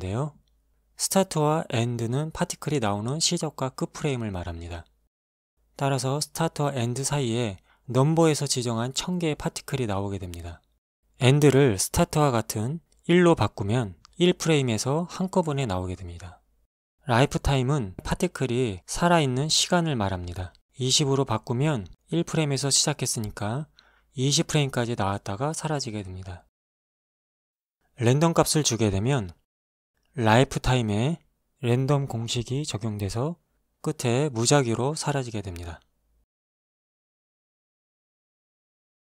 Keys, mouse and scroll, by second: 1.9 shift+click, 2.7 shift+click, 3.5 scroll down 1, 5.4 Escape, 10.9 click, 11.7 KP_1, 12.0 Return, 13.5 alt+a, 18.0 click, 19.0 KP_2, 19.2 KP_0, 19.6 Return, 23.7 alt+a, 25.4 alt+a, 26.6 shift+Left, 28.3 click, 30.3 alt+a, 32.8 Escape, 35.3 Right, 35.8 Right, 38.7 Right.